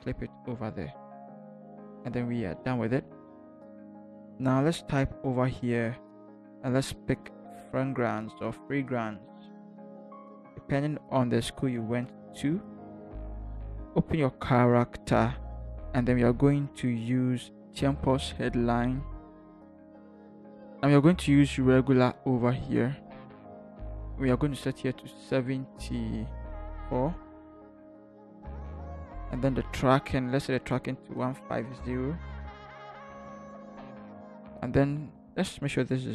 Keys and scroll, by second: 9.5 ctrl+c, 10.3 ctrl+v, 12.1 v, 27.3 7, 28.0 Return, 31.6 1, 32.0 5, 32.4 0, 32.8 Return.